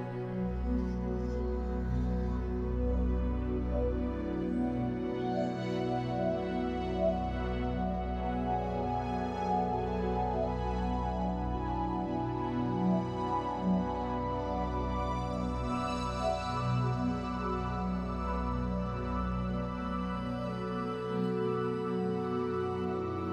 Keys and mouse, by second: 0.3 Tab, 0.8 middle click, 1.2 shift+middle drag, 1.5 click, 1.6 Tab, 1.9 Tab, 2.1 click, 2.9 right click, 5.1 click, 5.4 Tab, 5.6 Tab, 6.2 click, 6.6 click, 6.7 Tab, 6.9 Tab, 8.4 click, 8.8 alt+shift+click, 9.2 alt+shift+click, 9.9 middle click, 10.4 alt+shift+click, 11.0 ctrl+s, 12.8 Tab, 13.0 middle click, 13.8 click, 14.0 Tab, 14.4 click, 15.4 middle click, 15.9 Tab, 17.9 ctrl+z, 19.6 click, 20.2 alt+shift+click, 20.9 ctrl+KP_Add, 21.5 middle click, 22.2 ctrl+KP_Add, 22.4 middle click.